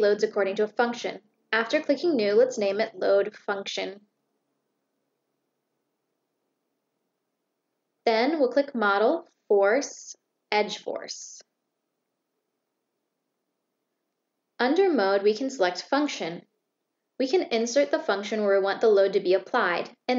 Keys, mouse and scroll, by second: 0.4 click, 7.7 click, 13.8 click, 15.7 click, 16.2 click, 17.2 click, 19.0 click.